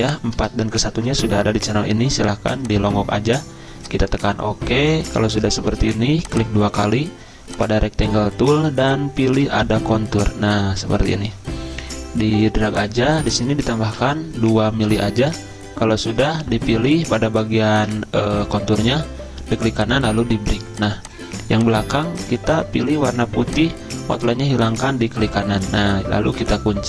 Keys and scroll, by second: 0.9 5, 13.9 2, 14.8 Return.